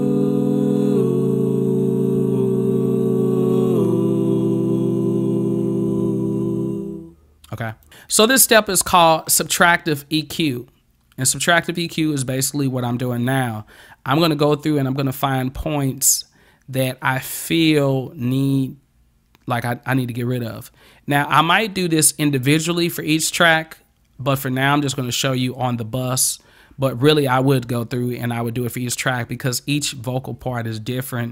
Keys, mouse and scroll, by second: 7.8 click.